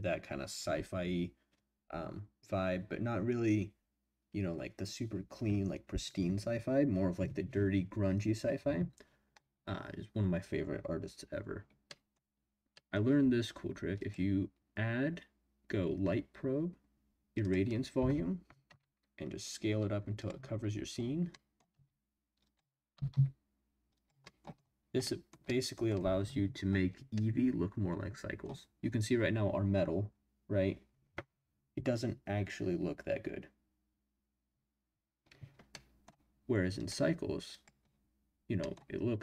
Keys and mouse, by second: 11.9 middle click, 12.7 middle click, 14.1-16.3 drag, 17.5 click, 18.6 s, 20.2 click, 21.3 middle click, 22.4 click, 22.4 s, 22.9 s, 23.1 z, 23.9 click, 24.3 middle click, 25.0 middle drag, 25.5 middle click, 27.2-29.0 middle drag, 35.7-36.1 middle drag, 36.7-37.7 middle drag, 38.6 middle click.